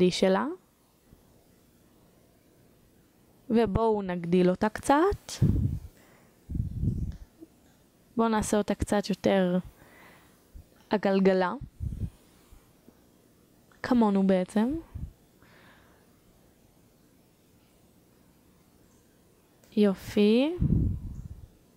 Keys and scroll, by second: 9.4 1, 18.2 1, 21.3 3.